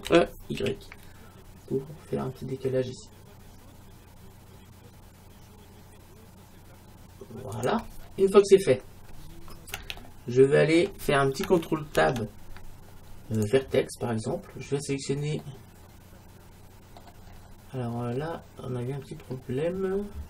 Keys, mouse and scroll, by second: 0.1 e, 7.7-9.5 drag, 12.0 ctrl+Tab, 14.0 middle click, 14.2-15.3 middle drag, 15.9-17.1 middle drag, 17.4-18.1 scroll down 1, 18.1-20.1 scroll down 1, 20.1-20.2 scroll up 1.